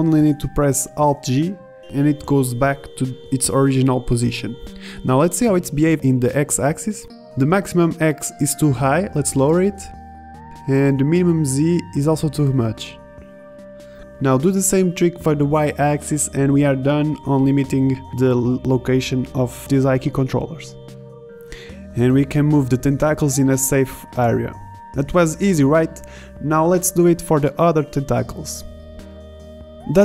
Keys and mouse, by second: 0.5 alt+g, 5.1 click, 6.4 click, 14.4 alt+g, 19.8-20.5 drag, 21.5 click, 23.4-23.9 middle drag, 23.9 click, 24.1 middle click, 24.2 click, 24.4 click, 24.4 g, 24.7 g, 25.1 g, 25.2 g, 25.8 ctrl+z, 26.4 alt+g, 26.9 ctrl+z, 27.0 g, 27.4 g, 27.8 g, 28.0 g, 28.7 alt+g.